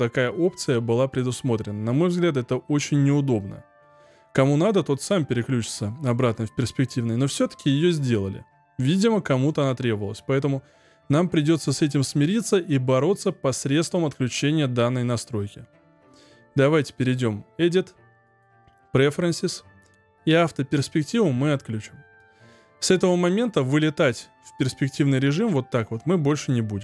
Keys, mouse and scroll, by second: 16.9 click.